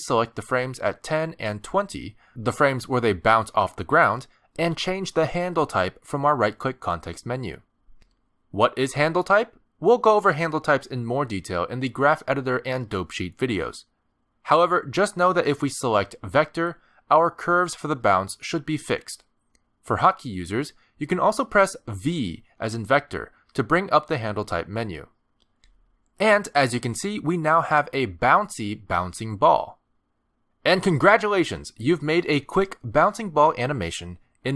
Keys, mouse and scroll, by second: 0.9 click, 5.2 click, 6.4 shift+click, 7.9 right click, 19.9 space, 22.1 space, 23.0 v, 26.1 space.